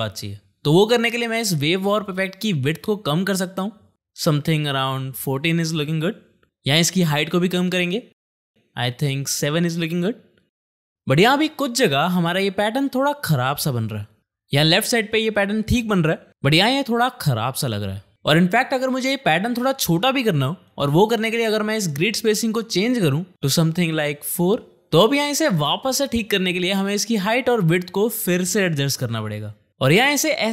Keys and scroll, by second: 10.9 space, 23.8 4, 24.2 Return, 25.5 space.